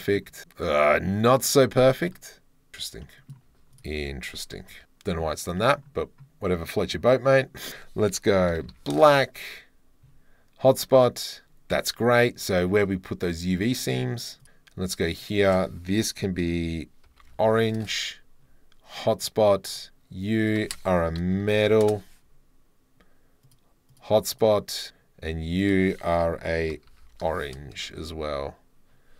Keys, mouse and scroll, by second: 0.0 middle drag, 2.1 middle click, 2.4 middle click, 2.5 scroll, 2.7 Tab, 2.7 middle click, 3.2 click, 3.3 middle click, 3.4 2, 3.8 alt+click, 4.8 KP_Decimal, 4.8 Tab, 4.8 scroll, 5.2-5.6 middle drag, 5.8-6.2 middle drag, 6.8 click, 7.4 click, 7.7-9.0 drag, 13.7 shift+drag, 13.9-14.4 shift+middle drag, 17.9-19.2 middle drag, 19.6 middle click, 21.2 click, 23.9 click, 24.4 click.